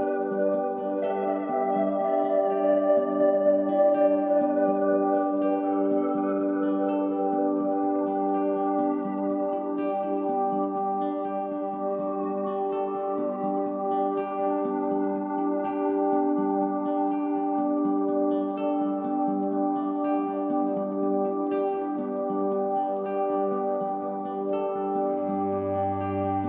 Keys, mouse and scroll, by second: 4.6-7.4 drag, 7.4-9.9 middle drag, 9.9-10.9 scroll up 2, 10.9-12.5 shift+middle drag, 12.5-13.5 scroll up 2, 13.5 click, 18.7 click, 22.9-26.4 middle drag.